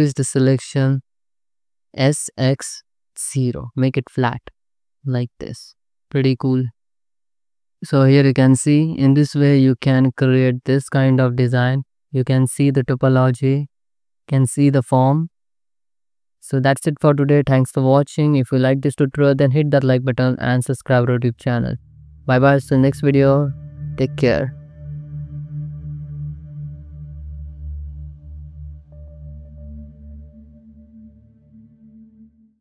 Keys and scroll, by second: 1.7 Escape, 2.0 s, 2.4 x, 3.0 0, 5.6 Tab, 6.0 alt+shift+z, 7.3 ctrl+s, 12.0 alt+shift+z, 16.1 ctrl+s, 18.3 ctrl+s.